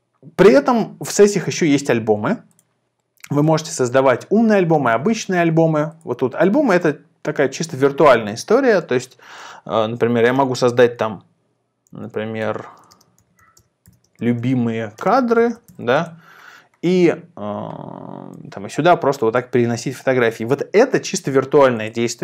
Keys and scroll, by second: 11.9-16.1 typing.